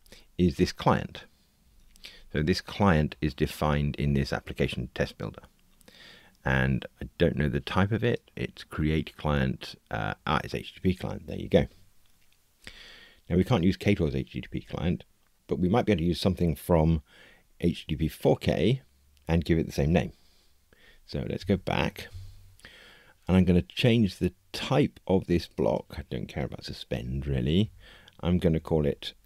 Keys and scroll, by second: 2.4 super+b, 8.1 super+b, 21.3 super+[, 27.1 Delete, 28.5 alt+shift+Right.